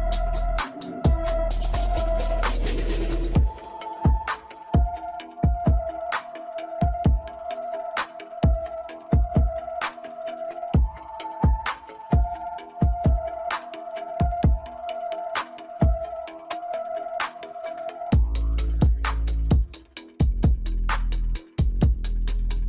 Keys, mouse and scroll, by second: 0.3-3.4 middle drag, 4.7 click, 7.4 click, 8.7-11.5 shift+middle drag, 11.5 click, 13.0 click, 20.7 Tab, 21.6-22.6 scroll down 1.